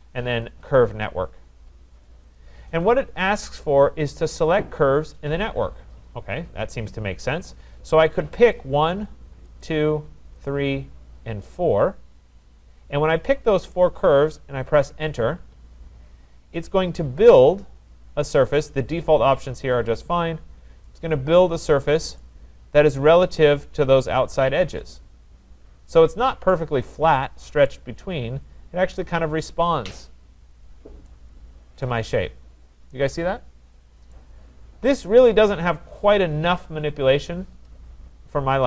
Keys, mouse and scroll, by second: 0.6 click, 2.3 click, 8.5 click, 9.6 click, 10.5 click, 11.5 click, 15.4 Return, 17.6 Return, 17.9 click, 19.9 click, 20.4 scroll, 22.2 right click, 22.5 scroll, 25.6 scroll, 26.5 right click, 26.8-27.5 scroll, 31.0 right click, 31.3 middle click, 31.5 middle click, 32.4 scroll, 34.1 right click, 34.8-35.1 scroll.